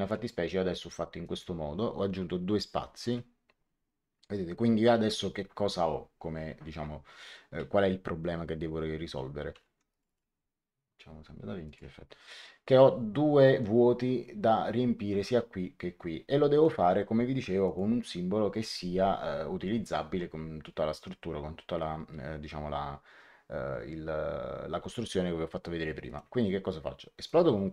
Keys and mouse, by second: 1.1 click, 2.9 click, 9.6 Escape, 9.8 click, 11.6 click, 17.6 click, 26.0 right click, 27.2 click.